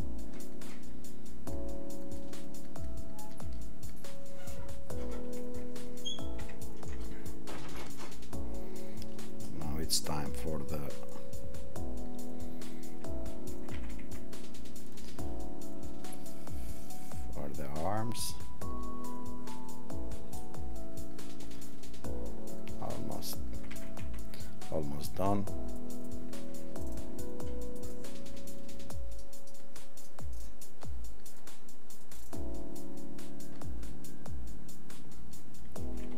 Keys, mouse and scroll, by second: 4.0 click, 4.9 click, 6.4 ctrl+-, 7.0 ctrl+-.